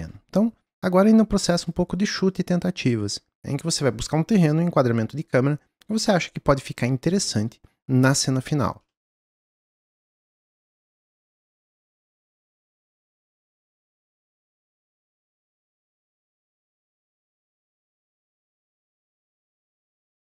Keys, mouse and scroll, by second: 12.0-13.0 shift+drag, 13.6-15.9 middle drag, 16.6-19.8 shift+middle drag, 19.8 click, 20.0-20.4 middle drag.